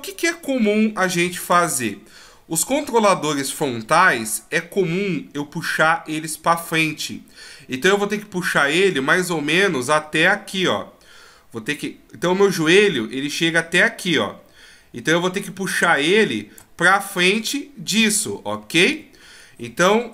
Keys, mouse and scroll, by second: 1.2 KP_3, 3.4 right click, 10.1-13.0 d, 13.0 click, 18.6 a, 18.9 a.